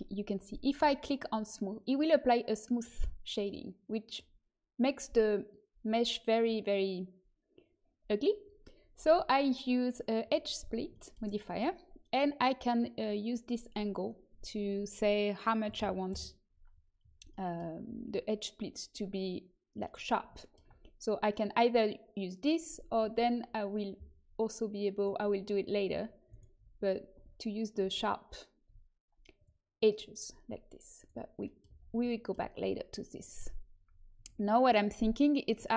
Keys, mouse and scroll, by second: 0.0 middle click, 0.6 click, 2.7-8.4 drag, 3.4-4.4 middle drag, 9.0-10.8 drag, 10.8 middle click, 14.2-16.9 drag, 16.9 middle click, 22.9 Tab, 24.9-26.1 drag, 27.1 a, 27.8 a, 28.6 a, 31.6 a, 34.1 Tab.